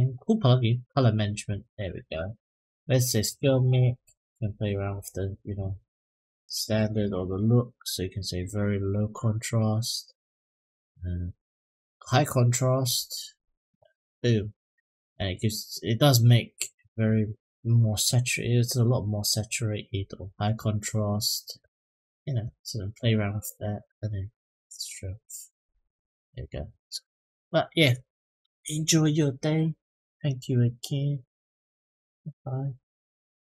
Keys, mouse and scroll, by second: 0.7 click, 1.2-2.3 scroll down 6, 2.5-4.4 drag, 4.5-4.9 scroll down 1, 5.2-5.8 drag, 6.0 click, 6.8-9.0 drag, 10.3-12.9 drag, 18.6-20.2 drag, 23.2-25.7 drag.